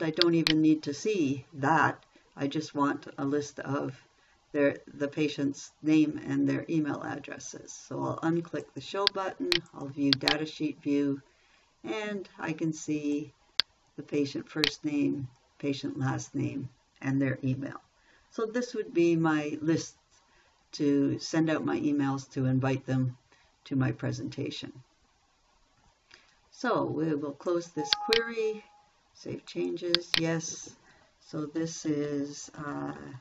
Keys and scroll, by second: 33.0 shift+p.